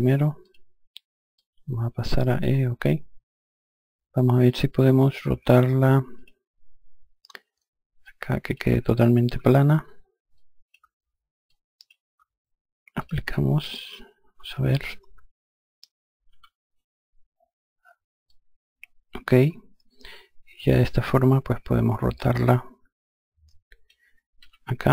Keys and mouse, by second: 5.6 click, 7.5 click, 9.3 KP_0, 9.8 click, 10.3 KP_0, 10.9 click, 11.5 KP_0, 12.5 click, 15.8 F1, 17.7 alt+click, 23.9 r.